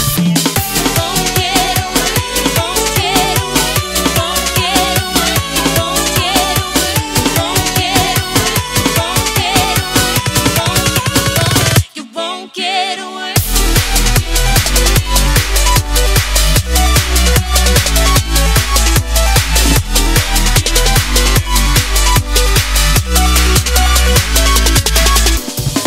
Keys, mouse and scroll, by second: 0.1 s, 1.8 click, 8.5 ctrl+shift+s, 10.1 click, 17.5 ctrl+click, 17.7 ctrl+z, 18.9 ctrl+s, 21.1 click.